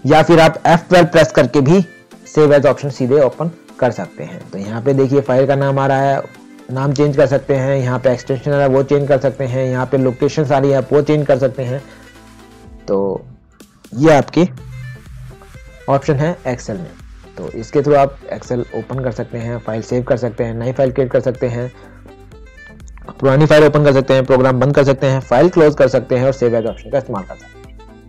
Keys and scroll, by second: 1.5 F12.